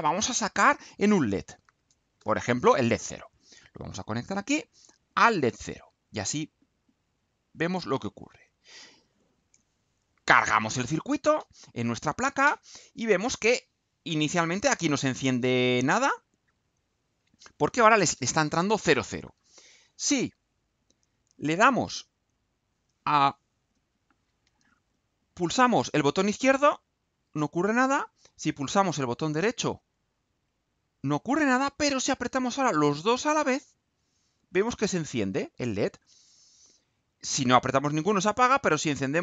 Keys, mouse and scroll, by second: 0.1 click, 1.2-2.1 typing, 2.1 shift+Return, 4.2 click, 4.7 click, 5.5 click, 6.4-7.8 drag, 8.1 click, 10.1 ctrl+u.